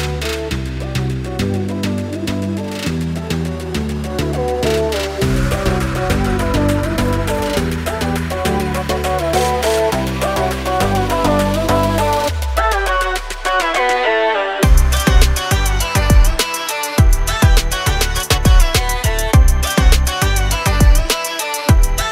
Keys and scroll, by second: 0.3 m, 1.8 Right, 4.1 space, 6.4 m, 6.9 Right, 7.2 Left, 7.7 space, 7.8 Escape, 13.5 r, 15.8 space, 16.6 m, 17.0 Up, 19.1 s, 20.6 space, 21.4 m, 21.9 Up.